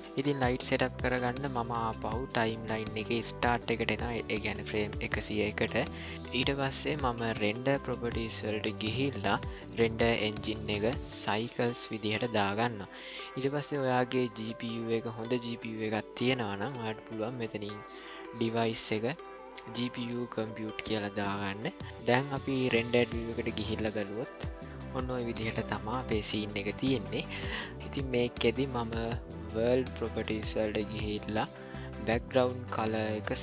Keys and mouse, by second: 3.1 click, 10.1-11.4 drag, 18.5-20.5 drag.